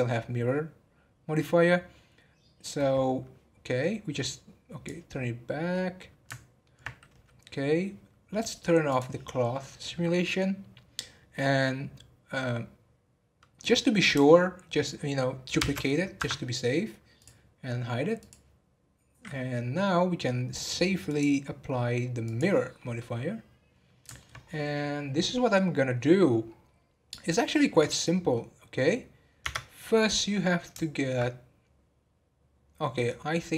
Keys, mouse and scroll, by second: 4.2-5.7 drag, 5.7-8.7 middle drag, 8.9 click, 15.5 shift+d, 17.2 drag, 18.2 click, 21.0-22.9 drag, 22.9-24.4 middle drag, 24.4-24.7 scroll up 4, 25.2 scroll down 2, 27.4-29.4 middle drag, 29.4 Tab, 30.0-33.5 middle drag.